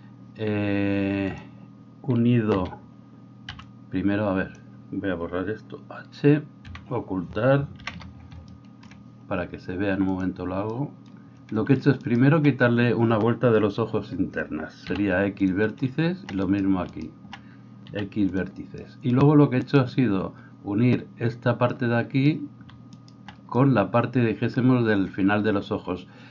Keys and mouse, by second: 2.5-10.2 middle drag, 2.5 a, 3.5 b, 6.7 h, 7.8 ctrl+KP_1, 10.2 click, 10.3-12.0 middle drag, 12.0-14.9 alt+right drag, 14.9-17.9 middle drag, 14.9 x, 18.4-19.6 middle drag, 19.6 right click, 20.4-23.0 middle drag, 23.0-24.9 alt+right drag, 24.9-26.3 middle drag.